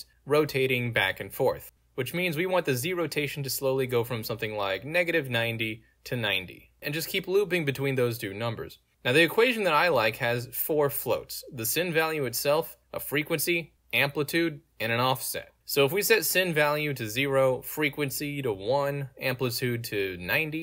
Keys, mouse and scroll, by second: 1.6-8.1 drag, 8.4 ctrl+z, 9.1 z, 10.0 click, 11.1 right click, 11.5 click, 12.6 click, 13.6 click, 14.5 click, 15.1 click, 17.2 click, 19.1 click, 20.5 click.